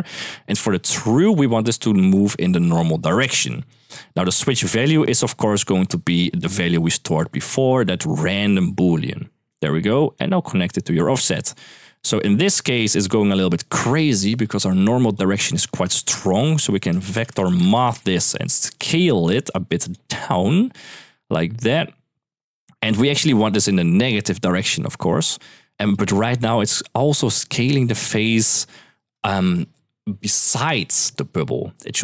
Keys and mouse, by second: 1.1 click, 1.8-2.9 drag, 4.8-5.2 middle drag, 6.2 middle click, 6.9-9.3 drag, 9.7 click, 10.2-10.8 drag, 14.4 middle click, 14.9 click, 15.7 shift+a, 18.5 drag, 19.2-19.7 drag, 20.2-22.6 shift+drag, 23.3 shift+middle click, 24.1-25.8 shift+drag, 26.9 shift+middle drag.